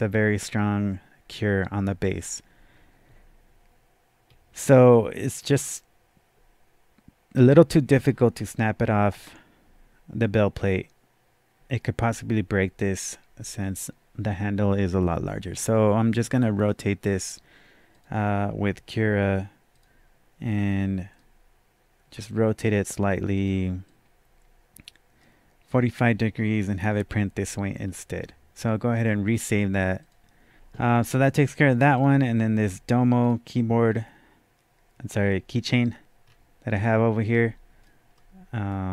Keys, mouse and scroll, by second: 0.0-0.7 typing, 4.0-5.5 right drag, 4.0 scroll down 1, 4.7 scroll up 1, 5.5 scroll down 1, 5.6 scroll up 1, 17.9 click, 17.9-18.5 scroll down 1, 19.8 click, 21.1-26.5 right drag, 23.3 click, 23.8-27.1 drag, 26.5-27.0 scroll down 2, 27.0 scroll up 2, 27.1-27.5 scroll down 1, 28.1-28.4 scroll down 2, 28.9 scroll down 1, 29.0 click, 29.9 scroll up 1, 30.0 click, 30.5 scroll down 1, 30.5 click, 30.5 scroll up 1, 31.9 click, 33.3 click, 35.2-35.9 typing, 36.3-36.7 scroll down 1, 36.7 scroll up 1, 37.3-38.9 drag, 38.2-38.9 middle drag.